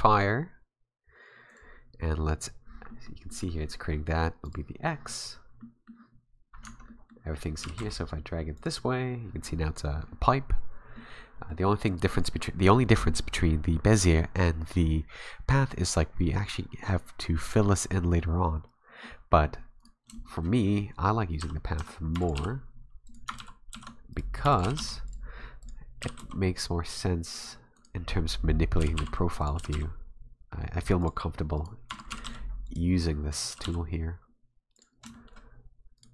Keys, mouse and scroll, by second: 2.9 middle click, 2.9-3.3 scroll up 1, 3.3 middle click, 4.4 click, 5.3-5.6 scroll down 3, 5.6 middle click, 6.6 Tab, 6.9 middle click, 7.6 g, 10.9 middle click, 12.1 middle click, 15.5 middle click, 18.2 middle click, 19.8 right click, 20.1 shift+middle click, 20.7-21.2 scroll down 2, 21.4 a, 21.8 a, 22.2 e, 22.3 g, 23.4 ctrl+z, 23.7 ctrl+z, 24.1 right click, 24.4 e, 24.6 g, 25.6 right click, 26.0 g, 27.8 right click, 28.8 g, 29.6 g, 31.6 right click, 31.9 e, 32.1 g, 33.3 right click, 33.5 g, 35.1 shift+middle click, 36.0 right click.